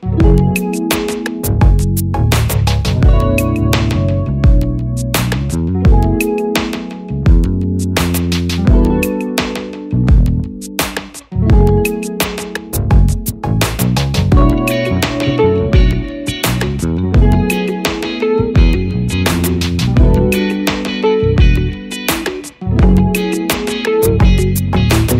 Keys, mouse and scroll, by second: 1.2 click, 7.5 double click, 11.0 Return, 16.2 click.